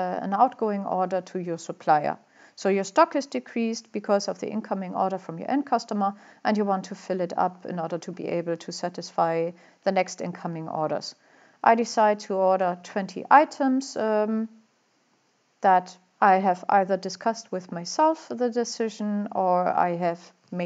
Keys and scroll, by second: 11.9-12.6 typing.